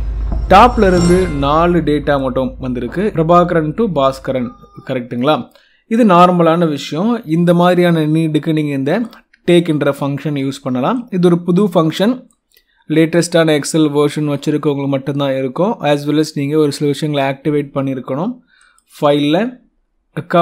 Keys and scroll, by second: 9.0 F2, 10.3 Escape.